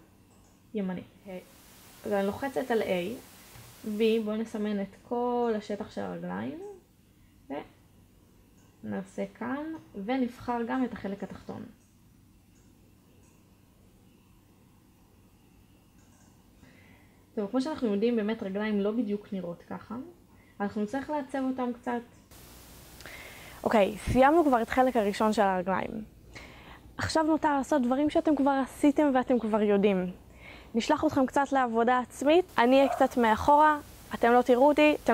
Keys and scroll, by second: 1.6 a, 3.9 b, 9.3 a, 9.9 b.